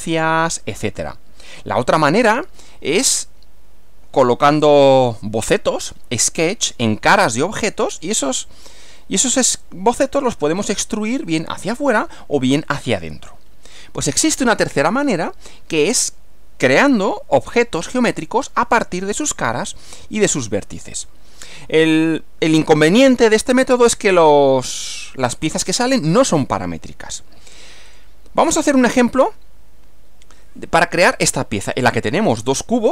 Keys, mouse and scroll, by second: 27.9 click.